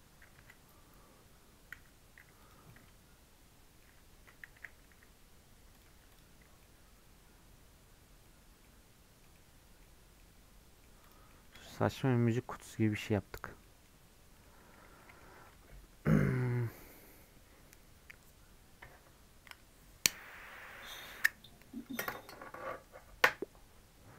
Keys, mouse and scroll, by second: 0.1 scroll down 1, 0.4 Tab, 1.7 /, 2.4 click, 2.7-3.8 middle drag, 3.8-4.1 scroll up 2, 4.1 Tab, 4.6 a, 4.9 e, 5.9 Tab, 6.1 click, 6.3 scroll up 4, 6.6-8.3 middle drag, 8.3 scroll down 3, 8.6-9.8 middle drag, 9.8-10.2 scroll down 2, 10.2 middle click, 11.0 click, 11.3 middle click, 11.9 scroll up 1, 12.0 middle click, 12.4 scroll down 2, 12.7 middle click, 13.5 scroll up 1, 13.6 middle click, 13.9-14.3 scroll down 7, 14.3-14.8 scroll up 2, 14.4 middle click, 15.0-18.1 middle drag.